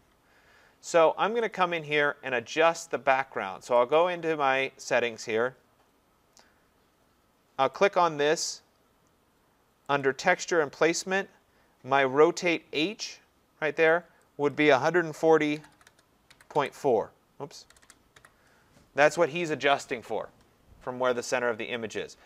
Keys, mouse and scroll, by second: 1.5 click, 3.9 click, 8.0 click, 10.0 click, 10.8 middle click, 10.9 middle click, 13.9 click, 13.9 scroll, 14.5 click, 15.3-18.7 typing.